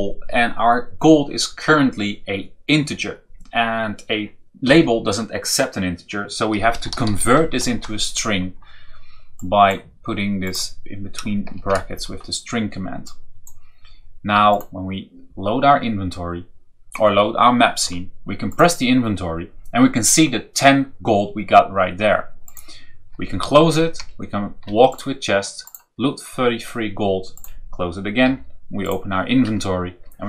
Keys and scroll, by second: 6.4-7.6 typing, 11.5 shift+0, 23.9 Down, 28.2 i.